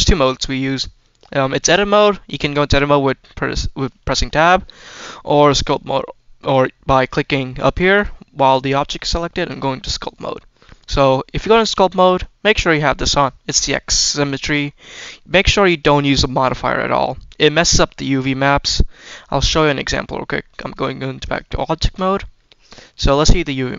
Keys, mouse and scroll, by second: 1.6 Tab, 5.2-7.5 drag, 7.8-9.6 drag, 11.7 shift+middle click, 13.0 click, 13.5 middle click, 14.1-14.5 scroll up 2, 14.5 middle click, 15.7 click, 16.3-18.9 drag, 19.1 middle click, 19.1-19.6 scroll down 2, 20.6-21.2 drag, 21.6 shift+middle drag, 22.1 middle click, 22.8 Tab.